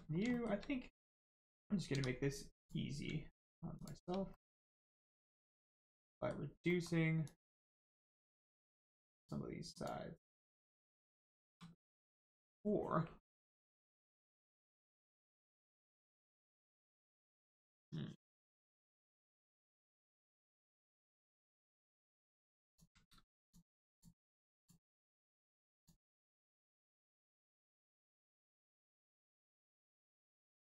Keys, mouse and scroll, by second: 0.3 shift+middle click, 1.9 middle click, 2.5 click, 3.7 shift+click, 4.3 middle click, 4.9 shift+middle click, 5.7 click, 6.0 middle click, 7.2 click, 7.5 middle click, 8.6 shift+click, 21.1 click, 23.4 alt+shift+click, 25.7 shift+click, 28.2 shift+click.